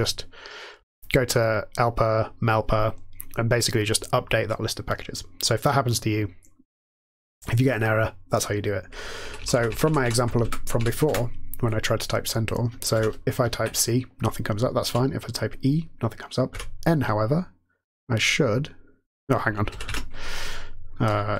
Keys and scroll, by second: 9.2 Up, 10.7 Up, 11.0 Return, 12.8 typing, 14.8 typing, 16.5 typing, 19.6 ctrl+x, 19.8 ctrl+c.